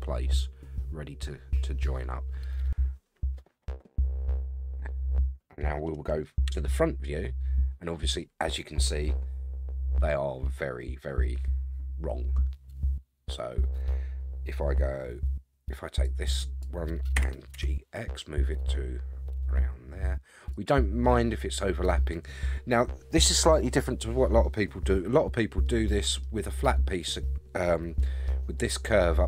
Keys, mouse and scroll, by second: 6.5 KP_1, 16.0 click, 17.1 g, 21.0-22.4 middle drag, 25.6 scroll down 1, 25.6 middle click, 28.0 middle click.